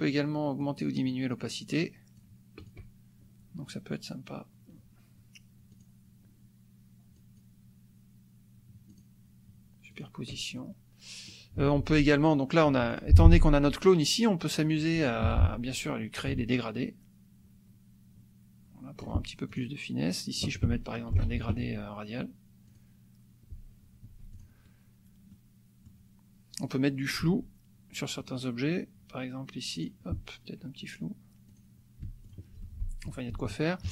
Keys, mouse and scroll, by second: 0.5-2.3 drag, 2.7 click, 5.7 click, 7.2 click, 9.0 click, 9.9 click, 10.5 click, 12.8 F2, 13.0 click, 13.8 click, 15.2 g, 16.2-19.2 drag, 19.5 ctrl+click, 21.1 ctrl+shift+f, 22.7 click, 24.0 F1, 24.3 click, 25.3 click, 27.2 F2, 29.7 click, 31.4 click, 32.0 F1, 32.2 click, 32.6 click, 33.8 KP_Subtract.